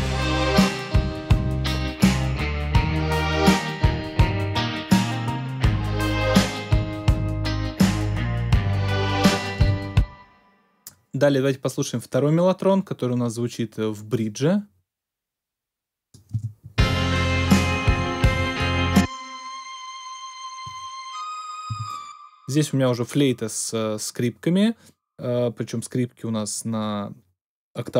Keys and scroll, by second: 9.5 space, 16.3 space, 21.6 space.